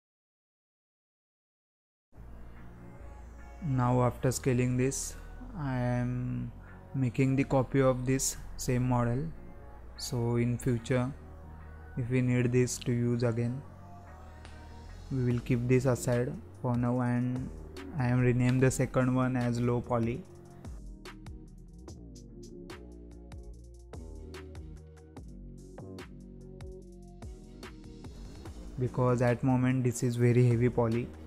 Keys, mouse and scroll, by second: 1.0 g, 3.3 ctrl+a, 4.1 scroll down 1, 4.4-4.7 scroll up 1, 4.7-5.3 middle drag, 5.3-5.6 scroll down 4, 5.6 middle click, 6.1-7.0 scroll up 3, 7.0-7.5 scroll up 1, 7.5 click, 7.7-10.8 drag, 13.6-14.0 scroll down 2, 14.0-17.5 middle drag, 17.5 shift+d, 20.5 click, 22.1 click, 23.4 click, 24.3 click, 24.5-30.4 drag, 30.4-31.1 scroll up 3, 31.1-31.2 middle drag.